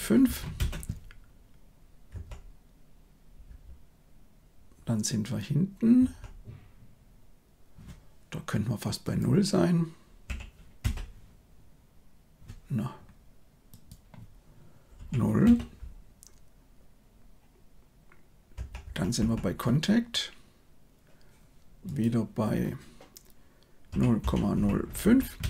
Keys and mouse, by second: 2.1 Right, 3.4 Right, 5.9 Right, 9.0 click, 10.7 Return, 13.7-15.5 drag, 18.5 Right, 18.8 Right, 19.1 Right, 21.8-25.4 drag.